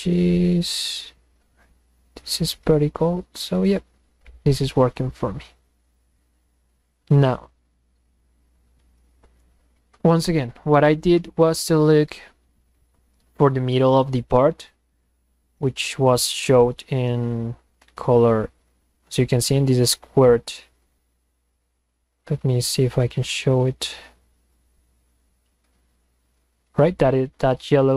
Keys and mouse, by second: 3.6 click, 8.6 Escape.